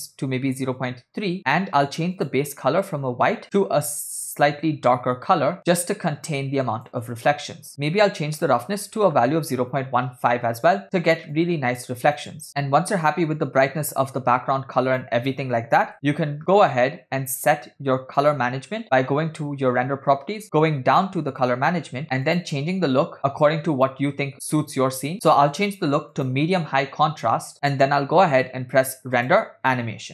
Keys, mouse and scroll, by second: 1.5 middle click, 2.2 click, 7.7 click, 11.4 click, 14.2 click, 17.7 click, 18.3 click, 20.3-21.3 scroll down 8, 21.3 drag, 21.9-22.3 scroll down 2, 22.4-24.4 drag, 25.2-26.6 drag, 27.7 space, 29.2 click.